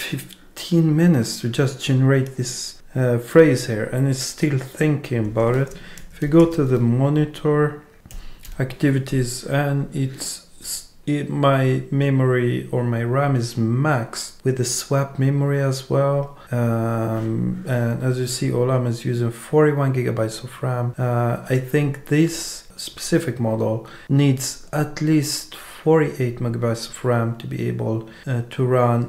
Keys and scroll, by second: 5.5 super+space, 7.2 BackSpace, 8.1 Down.